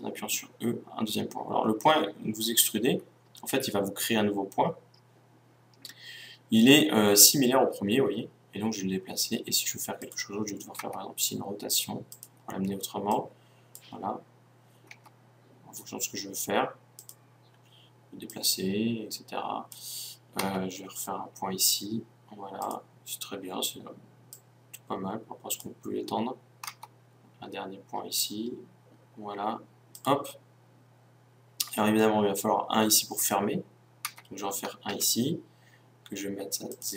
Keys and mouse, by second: 10.1 click, 10.8 r, 12.2-13.5 drag, 14.4 click, 15.0 r, 19.9 click, 20.4 e, 22.7-25.1 drag, 25.9 click, 26.7 e, 30.1-31.8 drag, 32.1 middle click, 34.1 e, 36.8 click.